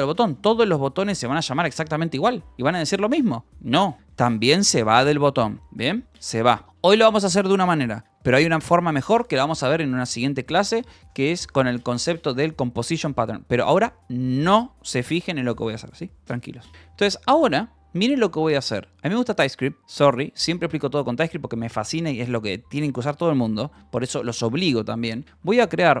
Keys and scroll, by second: 4.5 Escape, 6.6 k, 16.7 k, 18.7 a, 18.9 Return, 25.3-26.0 typing.